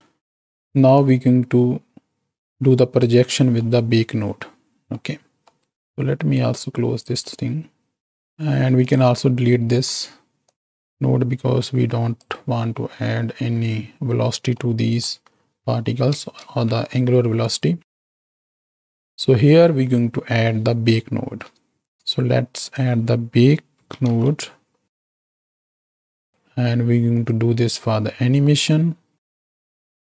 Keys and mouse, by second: 1.0-3.0 drag, 3.7-4.8 middle drag, 5.4-5.8 middle drag, 6.9 click, 8.8 click, 9.7 ctrl+x, 10.4-12.4 drag, 14.5 click, 14.5 middle click, 16.3 ctrl+space, 17.4 click, 18.5 click, 21.7 shift+a, 27.1 click, 29.5 click.